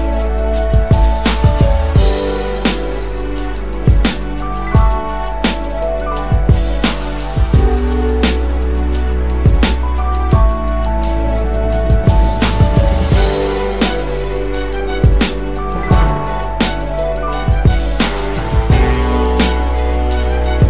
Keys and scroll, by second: 1.0 KP_3, 1.2 KP_1, 1.4 KP_2, 2.6 Return.